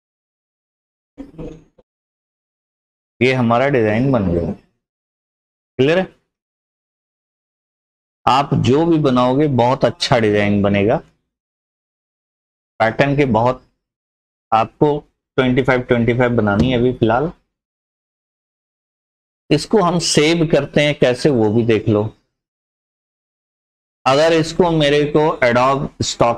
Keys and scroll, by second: 0.9 ctrl+r, 19.5 p, 20.5 F4.